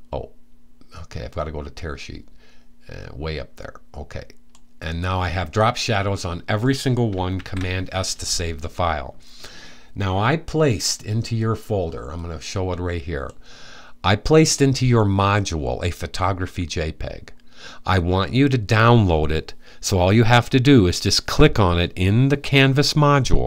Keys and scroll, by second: 7.0 super+s.